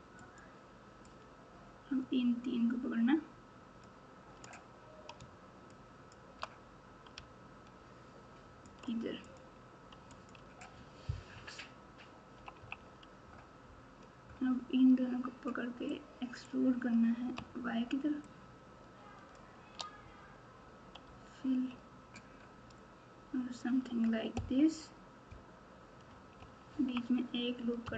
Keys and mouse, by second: 1.2-3.8 drag, 5.8 shift+click, 7.1 g, 9.2 click, 10.1 alt+click, 10.3 alt+z, 11.3 KP_1, 12.3 KP_2, 12.5 KP_2, 15.9 click, 16.1 click, 18.2-19.3 shift+drag, 21.0 f, 24.3 KP_1, 26.3 KP_2, 26.7 KP_2.